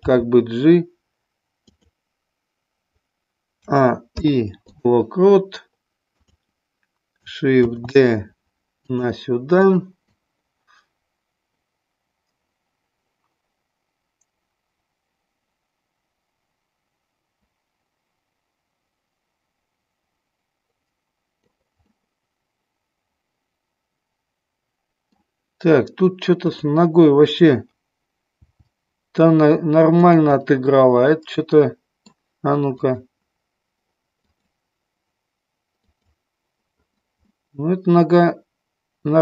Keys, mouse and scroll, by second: 0.0 g, 1.7 click, 3.6 a, 4.0 i, 7.6 shift+d, 8.9 click, 9.6 click, 10.1-21.4 drag, 21.9-25.3 middle drag, 26.5 click, 28.3 g, 30.0 click, 30.4 scroll up 1, 30.5-32.3 middle drag, 32.8 click, 34.1 click, 35.9 click, 37.3-39.2 middle drag.